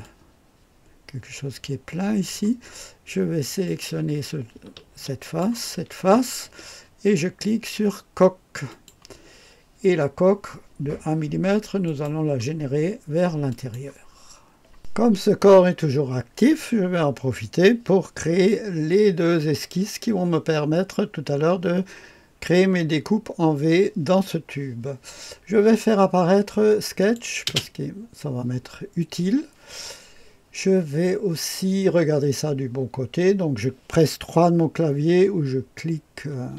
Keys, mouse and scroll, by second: 0.0-2.4 drag, 3.6 click, 5.2 ctrl+click, 5.8 click, 8.6 click, 11.8 click, 13.4 click, 14.7-17.0 drag, 14.7 typing, 27.0 click, 36.3 KP_3.